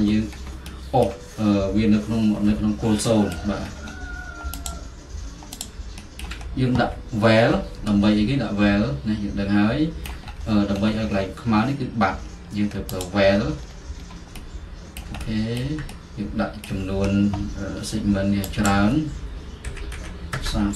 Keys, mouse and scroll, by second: 3.5-4.8 middle drag, 3.5-4.7 scroll, 4.7-6.4 drag, 6.4-7.8 middle drag, 6.4-7.8 scroll, 10.4-13.0 middle drag, 13.1 click, 13.7 middle click, 15.6 alt+middle click, 18.7-19.9 drag, 19.6-20.5 typing.